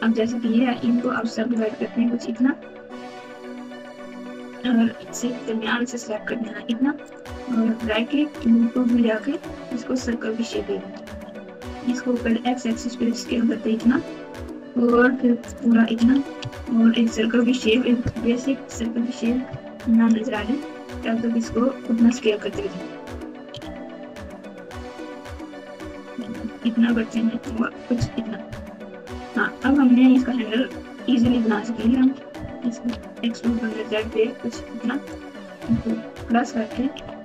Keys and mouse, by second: 0.7 q, 1.3 q, 4.0-5.4 drag, 7.1-9.3 right drag, 11.0 s, 13.9 s, 15.9 s, 18.1 KP_7, 18.4 KP_9, 19.4-20.3 KP_Add, 21.4-22.0 ctrl+KP_2, 23.4 s, 26.4 s, 28.4 KP_1, 29.5-30.0 KP_Subtract, 31.7 KP_Subtract, 31.9 KP_Subtract, 32.7 e, 36.1 ctrl+KP_Add, 36.9 KP_7.